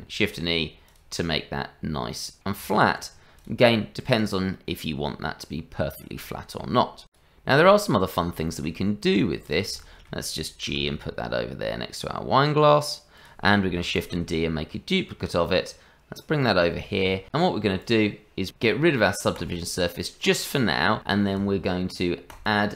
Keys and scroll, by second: 0.4 shift+e, 2.6 Tab, 10.7 g, 14.0 shift+d.